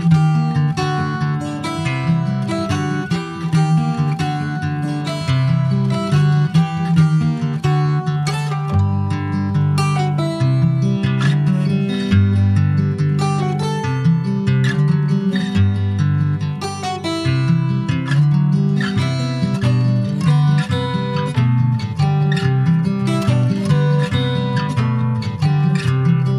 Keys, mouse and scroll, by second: 3.3 click, 3.4 Tab, 4.0-5.2 middle drag, 5.2 ctrl+s, 5.7 middle click, 6.3 ctrl+s, 6.3 click, 6.8 /, 7.4 click, 7.7-8.0 scroll down 2, 8.0 middle click, 8.7 ctrl+s, 8.8 middle click, 9.2 s, 9.7 shift+middle click, 10.5 ctrl+s, 11.7 middle click, 12.2 click, 12.6 alt+middle click, 13.0 alt+middle click, 13.4 alt+z, 13.7-14.1 scroll up 3, 14.1 Tab, 14.8 click, 17.4 click, 19.5 Tab, 19.7 click, 20.0 middle click, 20.4 alt+z, 20.7 click, 20.8-21.2 scroll down 2, 21.2 middle click, 21.7 ctrl+s, 21.8 ctrl+click, 22.0 middle click, 22.8 shift+s, 24.9 shift+a.